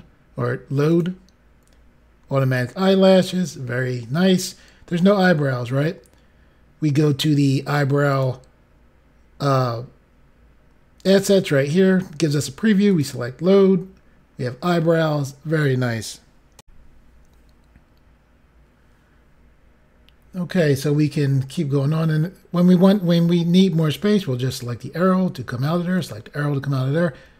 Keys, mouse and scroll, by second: 0.9 click, 8.1 click, 12.9 click, 16.5 Pause, 16.6 Insert, 24.5 click, 26.0 click.